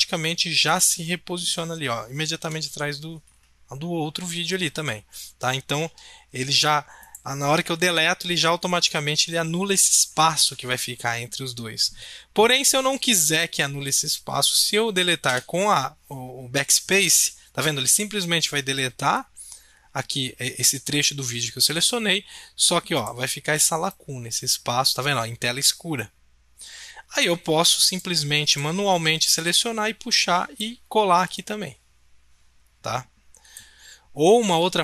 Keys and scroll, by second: 2.4 Delete, 6.4 ctrl+z, 15.2 BackSpace.